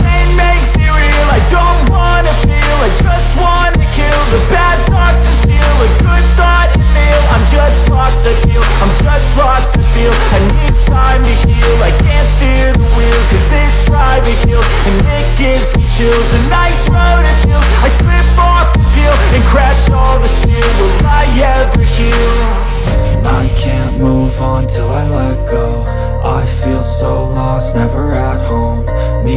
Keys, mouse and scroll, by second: 0.9 ctrl+shift+n, 2.2 click, 5.5 b, 7.4-8.5 typing, 8.9 click, 9.5 [, 10.2 ctrl+z, 11.0-12.4 typing, 13.1 click, 13.5 ], 13.8 click, 15.0 [, 15.4 click, 16.8 ctrl+z, 17.4 click, 20.1-22.2 typing, 20.7 click, 21.3 click, 22.2 click, 26.4 click, 27.6 ctrl+alt+shift+e, 28.5 click.